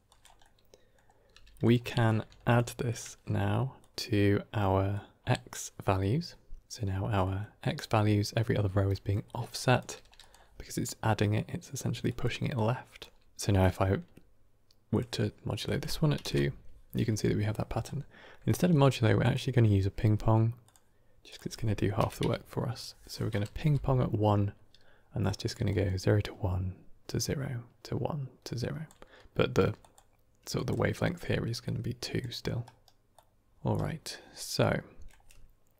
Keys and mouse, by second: 0.0 drag, 0.4 middle click, 1.2 g, 2.2 shift+d, 2.8 drag, 3.7 click, 4.8-5.2 drag, 7.1 middle click, 7.5 middle click, 8.9 middle click, 9.5 drag, 9.8 g, 11.7-13.2 typing, 11.9 click, 12.4-12.9 drag, 13.5-14.9 drag, 15.5-16.5 drag, 18.7 middle click, 19.1-20.6 drag, 21.1-24.4 drag, 25.4 d, 25.6-28.8 drag, 28.7-33.7 typing, 29.7 drag, 30.4 click, 31.5-32.1 drag, 33.0 click, 33.5 right click, 34.5-35.0 middle drag.